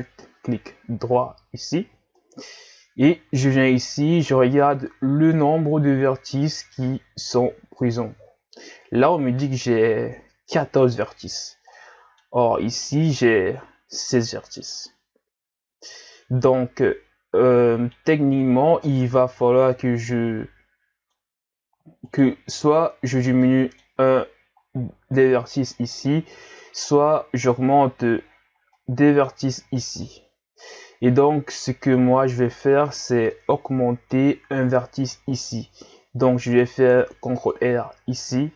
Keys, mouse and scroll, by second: 2.1-5.4 middle drag, 11.7-12.9 middle drag, 12.9 alt+right click, 14.8-17.9 middle drag, 22.1 alt+right click, 22.9-23.5 scroll down 3, 23.5-24.6 middle drag, 24.6-25.0 scroll up 3, 26.4-26.9 scroll up 4, 26.9-28.3 middle drag, 28.3-28.8 scroll down 1, 28.8-33.1 middle drag, 33.3-36.4 middle drag, 36.5 ctrl+r.